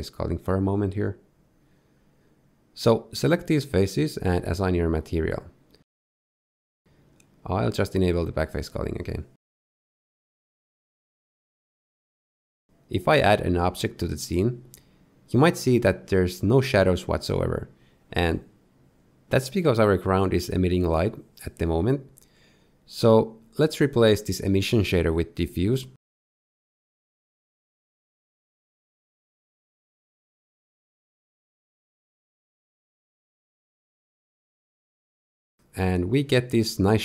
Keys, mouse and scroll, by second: 1.4 ctrl+KP_Add, 1.5 ctrl+KP_Add, 1.7 ctrl+KP_Add, 2.1 ctrl+KP_Add, 3.4 middle click, 6.2 click, 7.9 Tab, 8.8 click, 10.0 middle click, 11.1 middle click, 12.4 scroll up 2, 12.4 z, 12.6 click, 12.7 shift+middle click, 12.7 scroll down 3, 12.9 shift+middle click, 12.9 shift+scroll up 1, 13.8 middle click, 13.9 scroll up 1, 14.0 shift+middle click, 14.1 middle click, 14.2 shift+a, 14.5 middle click, 14.6 Tab, 14.7 g, 15.0 click, 15.2 click, 15.5 click, 15.5 right click, 15.8 middle click, 16.6-17.3 scroll up 3, 17.3 middle click, 17.6 shift+middle click, 17.9 middle click, 18.4 z, 18.5 middle click, 18.7 middle click, 19.1 middle click, 19.1 scroll down 2, 19.6 click, 21.3 click, 24.5 x, 25.1 shift+a, 28.0 f, 30.5 click, 32.6 click.